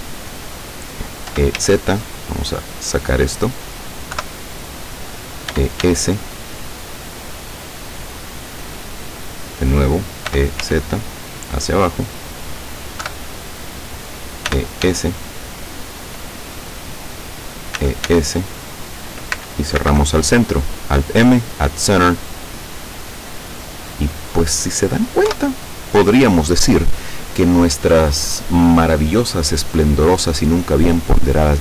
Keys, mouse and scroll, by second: 1.3 e, 1.6 z, 3.4 click, 4.2 KP_7, 5.6 e, 5.8 s, 8.7 click, 9.0 middle click, 10.3 e, 10.6 z, 12.0 click, 13.0 KP_7, 14.5 e, 14.9 s, 16.1 click, 17.9 e, 18.2 s, 19.0 click, 19.9 alt+m, 22.3 click, 23.0-24.8 middle drag, 25.4 KP_7.